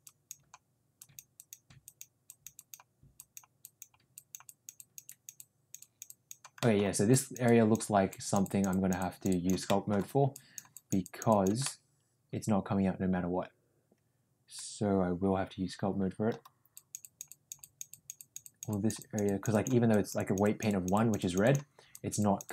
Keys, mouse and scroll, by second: 0.0 click, 0.9 click, 1.3 click, 1.8 click, 2.3 click, 2.5 click, 3.1 click, 3.6 click, 4.1 click, 4.4 click, 4.7 click, 5.0 click, 5.3 click, 6.6 middle click, 7.0 click, 7.4 click, 8.0 click, 8.4 click, 8.7 click, 9.7 middle click, 10.3 click, 10.7 click, 11.0 click, 11.2 click, 11.6-16.3 middle drag, 16.7 click, 17.0 click, 17.2 click, 17.6 click, 17.9 click, 18.1 click, 18.4 click, 18.6 click, 18.9 click, 19.2 click, 19.5 click, 19.9 click, 20.6 click, 21.4 click, 21.9 click, 22.1 click.